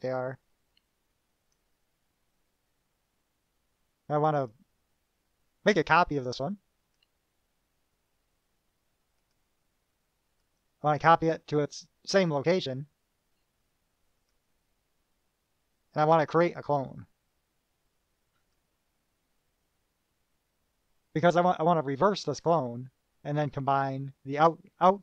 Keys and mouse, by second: 0.9-1.9 drag, 4.6 click, 7.0 right click, 9.5 click, 10.6 click, 14.4 click, 18.5 click.